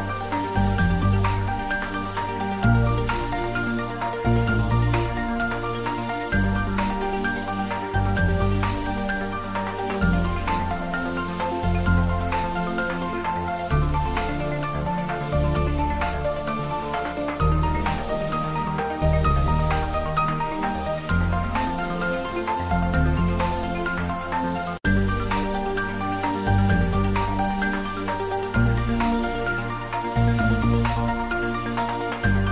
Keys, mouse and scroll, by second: 1.1 click, 2.0 click, 2.4 ctrl+middle click, 3.0 shift+z, 3.3 ctrl+middle click, 3.7 middle click, 4.6 click, 5.4 click, 5.9 ctrl+middle click, 6.2 shift+z, 6.7 ctrl+z, 7.0 Tab, 7.5 ctrl+z, 8.2 middle click, 8.9 ctrl+middle click, 9.2 shift+middle click, 9.9 middle click, 10.4-11.3 typing, 11.4 click, 12.5 Tab, 13.0 ctrl+z, 13.9 p, 14.2 click, 14.6 Tab, 15.0 click, 17.0 Tab, 18.1 click, 19.3 2, 19.6 click, 22.3 f, 22.6 Tab, 24.3 click, 24.8 ctrl+middle click, 25.3 s, 27.0 click, 27.6 Tab, 28.1 middle click, 28.9 Tab, 29.3 click, 29.5 Tab, 30.1 click, 31.0 Tab.